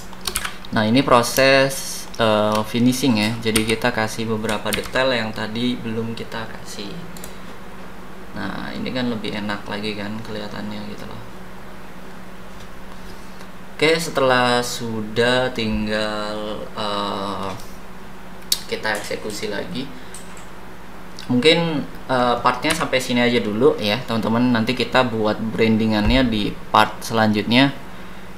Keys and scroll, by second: 0.3 c, 3.5 d, 4.8 ctrl+z, 22.7 h.